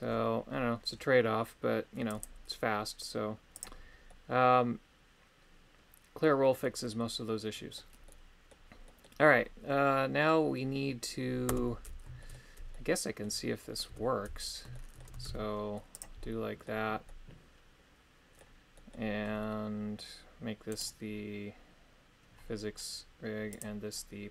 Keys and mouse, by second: 2.2-3.7 drag, 4.1-7.8 middle drag, 8.0 middle click, 8.8 middle click, 11.5 Tab, 12.2 shift+middle click, 12.7 middle click, 13.9 KP_3, 14.7 shift+middle click, 15.3 shift+d, 15.9 click, 16.2 middle click, 17.0-18.4 middle drag, 18.7 middle click, 20.7 right click.